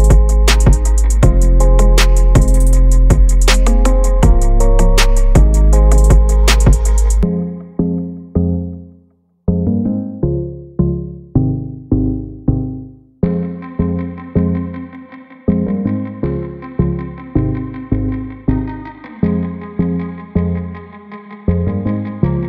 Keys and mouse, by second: 0.4 shift+z, 3.1 click, 5.0 drag, 5.9 click, 7.0 shift+click, 8.2 x, 10.3 middle click, 12.2 click, 13.2-15.1 right drag, 16.6 click, 17.7 click, 17.8 click, 18.4 click, 19.0 click, 20.7 KP_7, 21.5 shift+z.